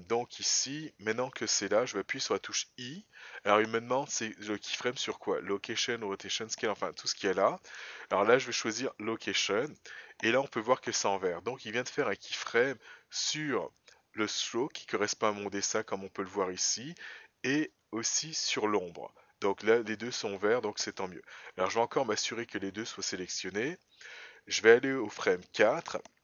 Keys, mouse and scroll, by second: 13.3 click, 17.7 click, 22.1 shift+click, 24.8 click.